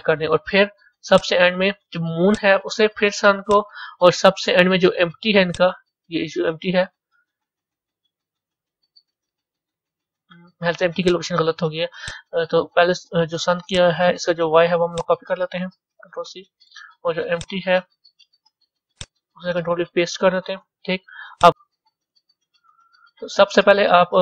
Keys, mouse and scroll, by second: 0.0 ctrl+p, 1.2 click, 2.4 click, 3.5 shift+click, 5.5 shift+click, 6.9-11.1 middle drag, 11.1 click, 12.1 click, 16.6 drag, 17.4 click, 20.5-21.4 drag, 21.5-24.2 middle drag.